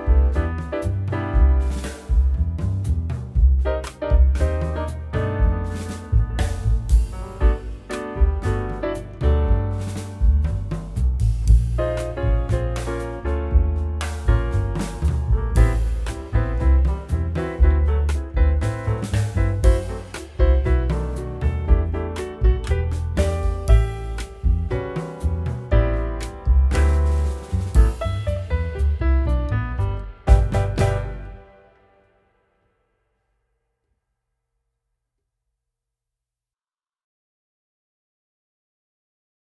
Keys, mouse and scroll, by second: 1.4 middle click, 7.9 z, 8.4-10.6 scroll down 1, 10.9 alt+middle click, 17.3 double click, 21.0 double click, 21.1 middle click, 21.9 F10, 38.0-39.5 scroll up 1.